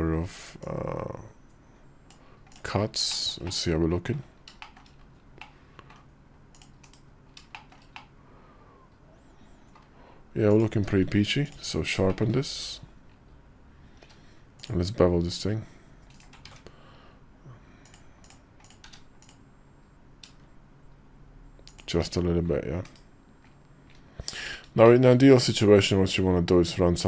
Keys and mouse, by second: 2.8 shift+middle click, 3.2 middle click, 4.4 shift+click, 5.1 click, 6.3 click, 7.3 shift+middle click, 7.7-9.6 middle drag, 10.3 click, 10.5 q, 11.8 shift+click, 12.5 KP_5, 13.8 q, 18.1 ctrl+`, 18.6 q, 22.6 /, 24.6 middle click, 25.2 Tab, 26.0 middle click.